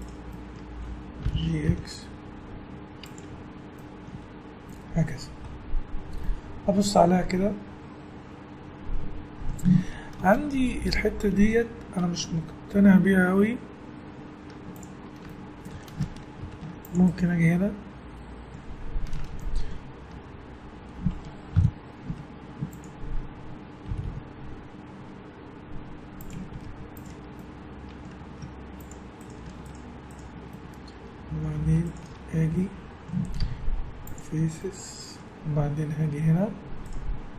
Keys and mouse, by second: 0.5 middle click, 0.6-1.9 drag, 1.2 g, 3.2 Tab, 4.1 a, 4.4-8.4 middle drag, 11.1 middle click, 13.8 middle click, 14.2 middle click, 14.4 Tab, 15.4 middle click, 16.4 ctrl+r, 17.9 middle click, 21.5 KP_1, 22.1 z, 23.9 g, 26.5 z, 28.3 ctrl+Tab, 28.5-29.7 drag, 29.7 right click, 30.8 middle click, 31.0-32.5 middle drag, 32.6 middle click, 33.4 x.